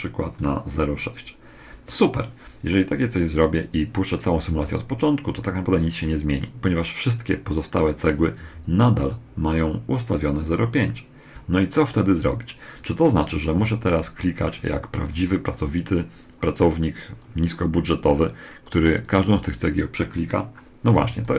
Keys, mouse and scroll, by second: 4.2 alt+a, 8.2 Escape, 8.8 right click, 11.3-14.6 right drag, 13.2 z, 14.4 a, 15.0 a, 18.0-20.9 right drag, 20.7 a, 21.1 b.